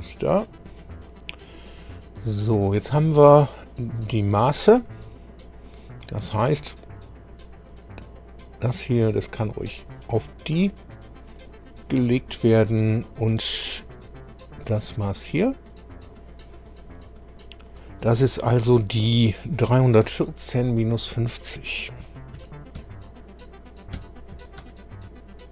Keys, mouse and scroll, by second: 0.1 click, 2.6 right click, 7.5 scroll up 1, 8.7 click, 9.7 click, 11.5 click, 14.3 click, 15.9 click, 17.2 click, 22.0 KP_3, 22.3 KP_1, 22.8 KP_4, 23.9 KP_Subtract, 24.3 KP_5, 24.6 KP_0.